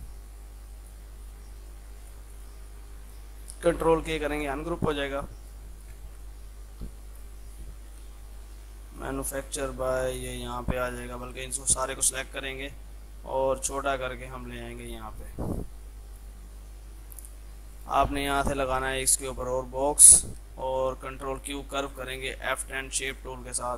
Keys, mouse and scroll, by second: 0.1-2.4 shift+drag, 2.7-4.3 drag, 4.3 ctrl+k, 4.9 click, 6.0 shift+c, 6.3-11.0 drag, 11.0 ctrl+z, 11.3 click, 12.4 l, 13.2-15.5 drag, 15.7 F2, 15.9-20.5 drag, 20.5 space, 21.1 ctrl+q, 21.9 F10, 22.4 click, 22.8 Up.